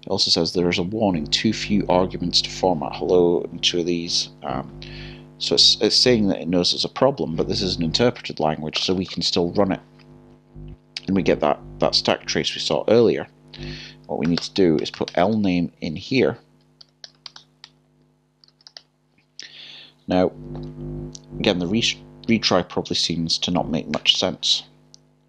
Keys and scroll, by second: 16.0-16.8 typing, 18.5 typing.